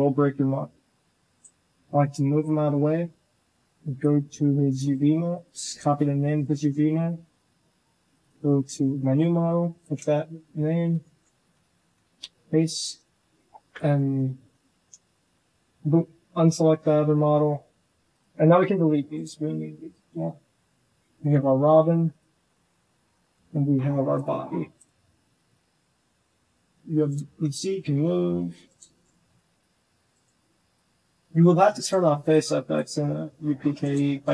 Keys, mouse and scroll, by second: 1.8 Tab, 4.6 click, 5.1 click, 8.0 click, 10.8 ctrl+j, 11.3 Tab, 11.6 z, 11.9 a, 12.1 c, 12.9 click, 13.1 Delete, 13.8 z, 14.3 shift+click, 14.7 Tab, 14.7 a, 14.9 shift+drag, 15.6 shift+click, 18.2 g, 19.2 Delete, 20.1 g, 21.7 click, 22.3 g, 24.0-24.7 drag, 25.3 click, 25.6 r, 27.5 click, 27.9 r, 28.7 shift+drag, 29.4 click, 29.6 r, 30.4 drag, 30.8 r, 32.2-32.6 drag, 32.8 r, 34.0 shift+click.